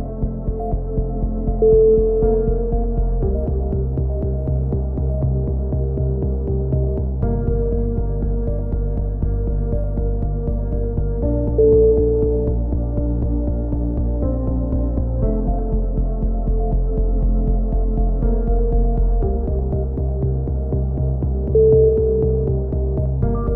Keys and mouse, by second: 0.0 click, 0.6 right click, 1.4-3.0 typing, 1.7 click, 2.6 right click, 4.3 s, 4.6 r, 5.4 a, 5.5 click, 7.7-9.3 right drag, 8.6-10.6 drag, 10.4 a, 11.1 click, 11.2 right click, 11.7 e, 11.9 z, 12.2-14.6 drag, 14.6 right click, 15.0 middle click, 15.0-16.5 typing, 15.2 click, 15.5 right click, 16.7 click, 20.1 right click, 20.2 ctrl+l, 20.5 h, 20.7 z, 21.0-22.4 drag, 22.0 KP_1, 22.4 b.